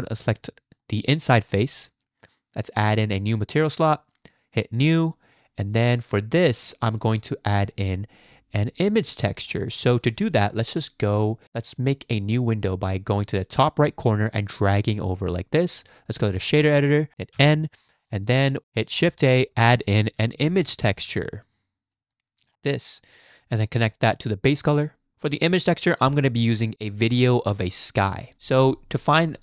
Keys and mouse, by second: 0.3 click, 3.3 click, 4.6 click, 9.5 shift+click, 14.1-15.3 drag, 15.9-16.6 drag, 17.3 n, 18.0 click, 18.3 click, 19.1 shift+a, 23.8-24.7 drag.